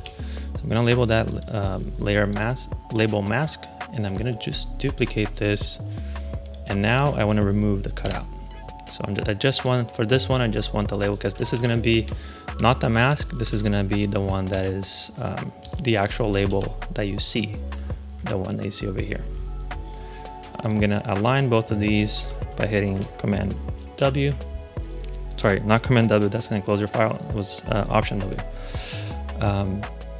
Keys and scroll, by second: 7.9 BackSpace, 11.4 super+r, 12.4 Right, 13.8 Right, 14.4 alt+shift+Left, 15.5 BackSpace, 16.4 Return, 23.9 alt+w.